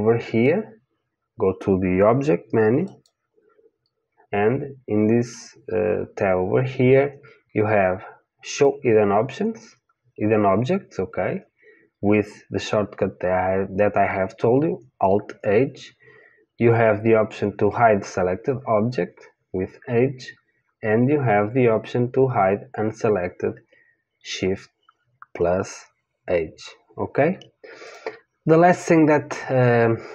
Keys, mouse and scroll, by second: 2.8-8.4 drag, 27.9 click.